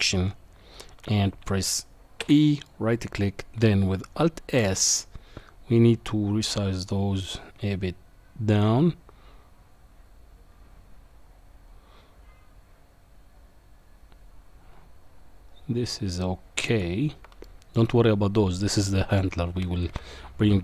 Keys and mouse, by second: 2.2 e, 4.6 alt+s, 17.4 middle click.